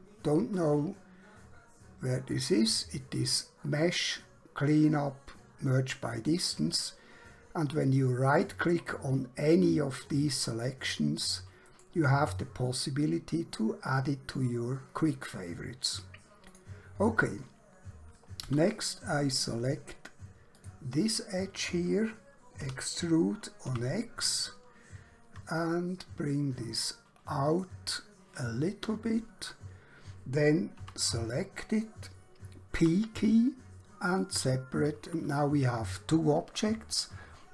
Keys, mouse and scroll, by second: 3.3 click, 8.3 right click, 11.7 right click, 16.5 click, 18.4 2, 20.5 click, 22.7 e, 23.7 x, 27.5 click, 30.7 3, 31.1 click, 32.8 p, 34.1 click.